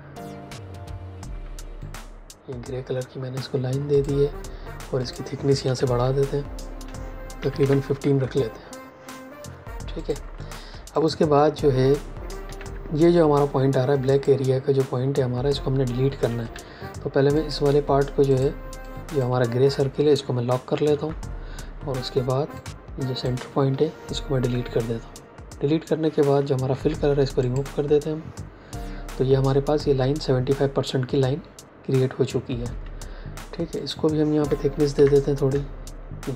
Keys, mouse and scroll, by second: 1.3 x, 1.7 click, 5.8 shift+Up, 7.3 KP_1, 7.5 KP_5, 8.0 KP_Enter, 9.9 click, 12.3 a, 16.4 v, 17.2 click, 20.7 ctrl+2, 21.9 a, 22.5 click, 24.3 Delete, 26.6 x, 27.3 click, 32.6 v, 33.7 click, 34.9 shift+Up.